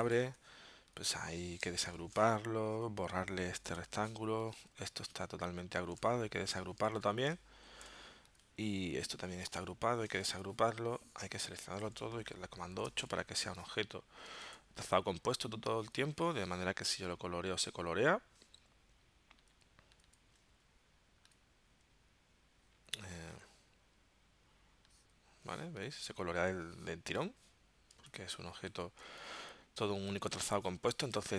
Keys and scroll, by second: 0.3 v, 1.9 shift+super+g, 3.7 BackSpace, 6.9 super+z, 7.7 shift+super+g, 9.8 shift+super+g, 12.6 super+8, 14.5 super+z, 26.7 v, 28.1 super+z, 28.7 super+z.